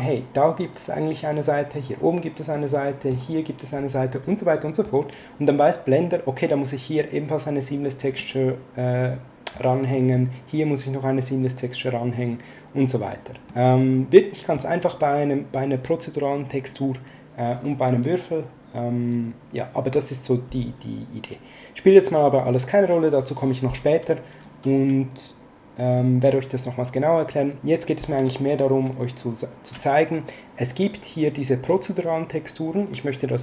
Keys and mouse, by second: 2.5 middle click, 4.3 middle click, 8.2 middle click, 9.9 middle click, 13.5 middle click, 24.4 click, 31.2 click.